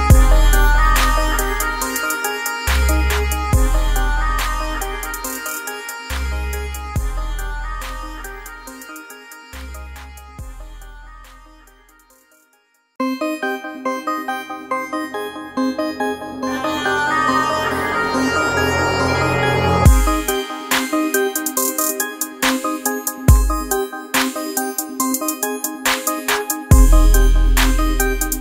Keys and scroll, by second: 26.7 ctrl+0.